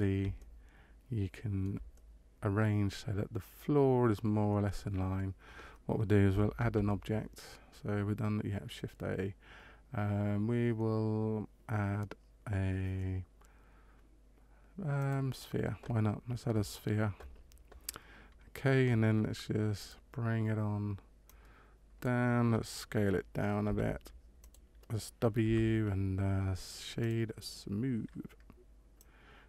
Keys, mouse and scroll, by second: 0.3 shift+middle click, 1.9 middle click, 6.5 shift+a, 19.7 click, 21.2 click, 23.6 s, 25.4 w, 28.9 click.